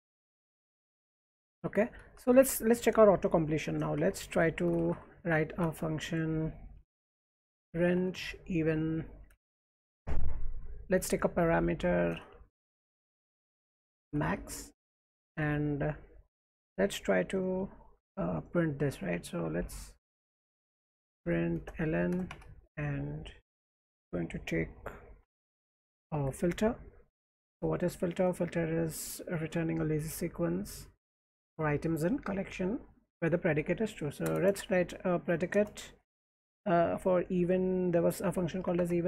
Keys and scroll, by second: 1.4-10.2 typing, 11.4-18.2 typing, 16.3 Tab, 19.7-20.7 typing, 21.2 Tab, 21.6 Return, 22.1 Return, 22.3 Tab, 24.9-26.2 typing, 27.2 Tab, 34.2 Return, 34.9-37.7 typing, 38.5 Tab, 38.7 Tab.